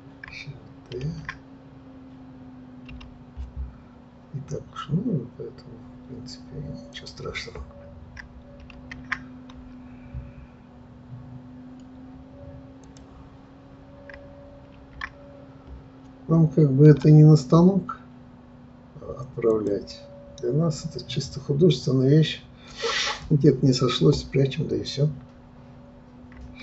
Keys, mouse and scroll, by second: 1.0 shift+d, 8.7 shift+d, 14.7 shift+d.